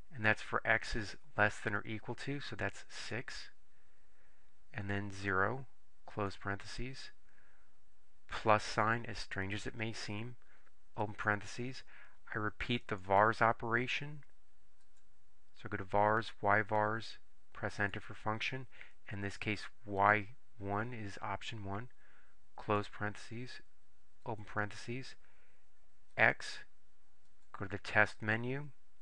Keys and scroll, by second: 3.1 6, 5.3 0, 6.3 ), 11.3 (, 15.0 Right, 17.9 Return, 20.1 1, 22.8 ), 24.4 (, 26.3 x.